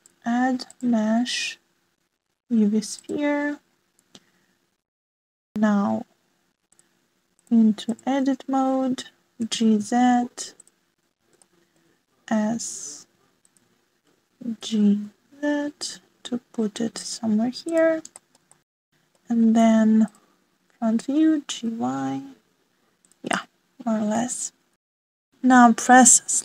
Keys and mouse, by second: 0.9-4.1 drag, 4.7 middle drag, 7.7 click, 8.3-9.0 drag, 10.4 g, 12.4 shift+middle click, 13.4 s, 15.5 g, 19.1 shift+middle click, 19.6 click, 22.1 g, 24.3 click, 24.5 middle click, 25.9 shift+middle click.